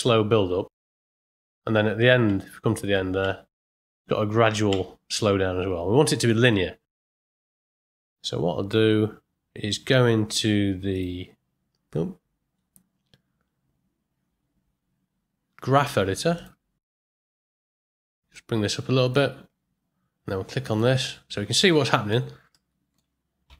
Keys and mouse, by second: 2.2 space, 2.8 click, 3.2 space, 4.7 space, 6.5 click, 10.9-16.4 drag, 18.3 click, 21.8 ctrl+middle click, 22.5 ctrl+middle click.